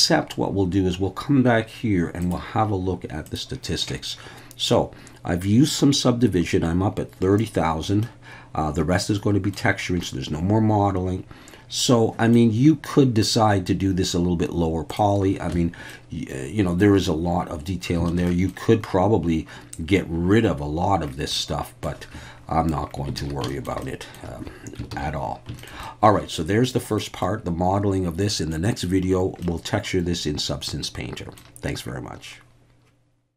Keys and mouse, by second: 2.3-3.6 drag, 8.0-9.5 middle drag, 10.0-12.3 middle drag, 15.5 Tab, 15.9 middle click, 18.1 alt+a, 18.3 middle click, 21.4-21.9 middle drag, 22.2 Tab, 23.2 alt+a, 23.5 shift+middle click, 23.8 middle drag, 24.9 ctrl+s, 25.6 shift+middle drag, 25.8-27.0 middle drag, 27.3-28.5 middle drag, 29.4-31.4 middle drag.